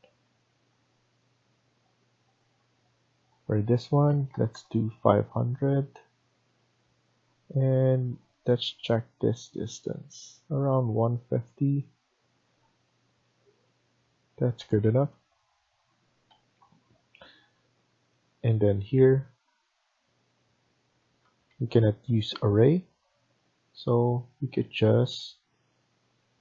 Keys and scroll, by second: 3.9 typing, 4.9 Return, 5.5 Escape, 10.5 Escape, 10.7 Escape, 13.2 BackSpace, 13.4 BackSpace, 14.3 Escape, 14.5 Escape, 14.7 Escape, 16.2 Escape, 16.5 Escape, 17.6 Tab, 21.1 Escape, 21.4 Escape.